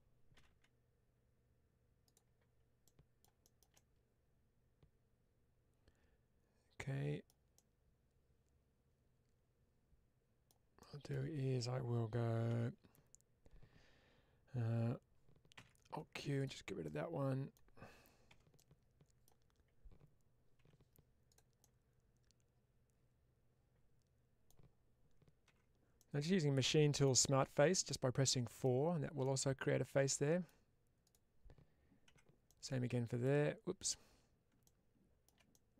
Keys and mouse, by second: 1.9 click, 2.7 middle click, 3.3-7.1 shift+middle drag, 7.4-10.3 middle drag, 10.7 middle click, 12.4 3, 15.4 alt+q, 16.7-19.1 middle drag, 18.5 w, 20.5 1, 21.2 click, 21.5-24.3 middle drag, 25.4 4, 25.9-26.9 middle drag, 27.8 middle click, 29.1-30.3 middle drag, 30.9-32.0 drag, 32.0 4, 32.3 middle click, 34.9 shift+middle click, 35.4 middle click.